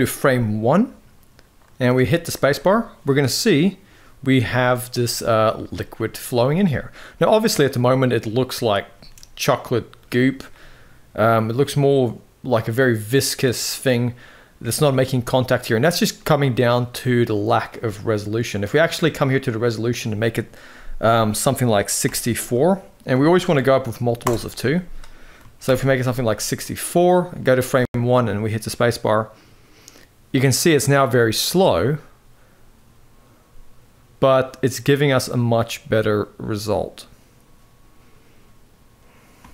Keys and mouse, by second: 0.4-1.6 drag, 4.9 middle drag, 4.9 space, 5.7-6.0 middle drag, 6.1 space, 7.9 middle click, 8.7 space, 9.5 middle drag, 10.3-13.6 middle drag, 14.5-14.8 middle drag, 15.9-16.4 middle drag, 19.4-24.1 drag, 25.6 shift+Left, 26.3-26.7 middle drag, 27.3 space, 39.2 space.